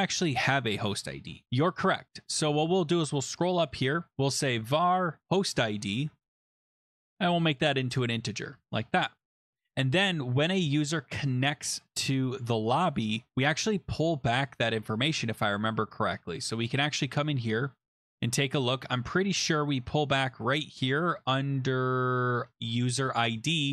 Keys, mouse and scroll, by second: 1.4 ctrl+c, 2.5-2.9 scroll down 8, 3.1-4.1 scroll, 4.0-5.0 typing, 4.1 click, 5.2 ctrl+v, 5.2 middle click, 7.0 Tab, 8.4-9.1 typing, 9.6-11.9 scroll down 6, 13.0 click, 13.1 scroll, 16.8 click, 18.0-19.7 scroll, 20.0 scroll down 2, 20.5 click, 21.7 scroll down 1.